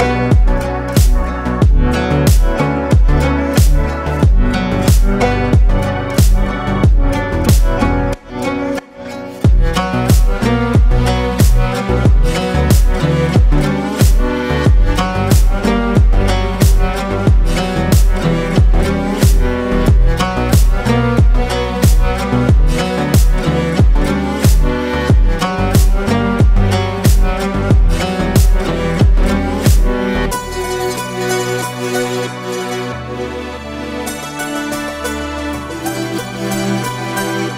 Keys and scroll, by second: 9.8 ctrl+space, 11.5 ctrl+space, 14.6 ctrl+x, 15.4 ctrl+x, 17.9 space, 19.7 ctrl+space, 20.6 ctrl+b, 23.0 ctrl+space, 29.7 ctrl+c, 32.0 ctrl+z, 34.3 ctrl+shift+z.